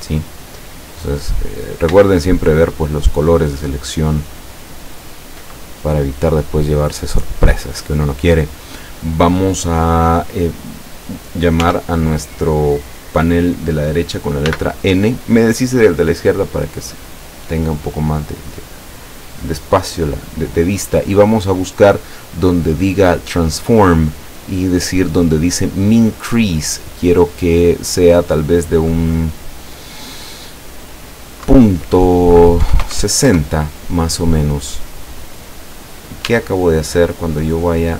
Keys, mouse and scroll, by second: 1.4 scroll up 2, 2.4 alt+shift+right click, 3.2 alt+shift+right click, 4.3 alt+shift+right click, 5.1 alt+shift+right click, 5.6-5.9 alt+shift+scroll down 2, 6.4 middle click, 7.0-7.9 scroll up 2, 8.2 scroll down 2, 11.7 t, 14.5 n, 17.5-17.8 scroll up 2, 18.2 scroll up 2, 21.8 scroll up 2, 26.5 click, 31.5 KP_Decimal, 32.7 KP_6, 32.9 KP_0, 33.3 KP_Enter, 36.3 Tab, 37.0 scroll up 2, 37.1-37.9 middle drag.